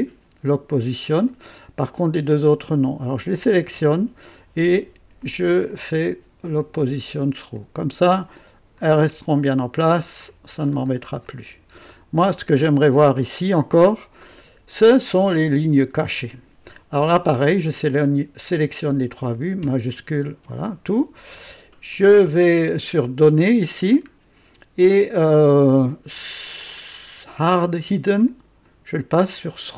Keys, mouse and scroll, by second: 1.8 click, 3.3 ctrl+click, 5.1 click, 5.7 click, 6.6 click, 7.5 click, 8.7-10.4 drag, 10.6-10.9 scroll up 2, 11.2-11.9 right drag, 12.2-12.6 scroll up 2, 12.7-13.9 right drag, 17.6 click, 20.1 shift+click, 23.5 click, 24.2-24.6 scroll down 2, 28.2 click, 29.4 click.